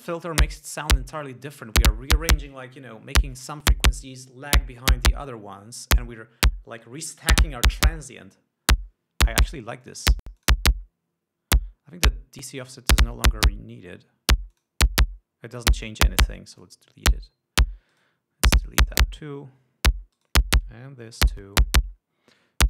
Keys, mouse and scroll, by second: 10.5 click, 10.9 click, 15.1 click, 16.3 right click, 17.3 click, 18.5 right click, 19.3 click, 20.7 right click, 21.7 click.